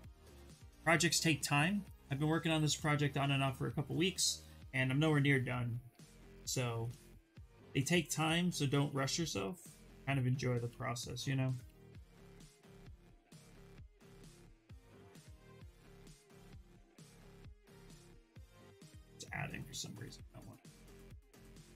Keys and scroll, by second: 7.9 s, 9.8 ctrl+z, 9.9 ctrl+z, 10.1 ctrl+z, 11.0 ctrl+z, 11.4 s, 18.2 ctrl+z, 18.4 ctrl+z, 18.5 ctrl+z, 20.3 ctrl+z, 20.5 ctrl+z, 20.7 ctrl+z.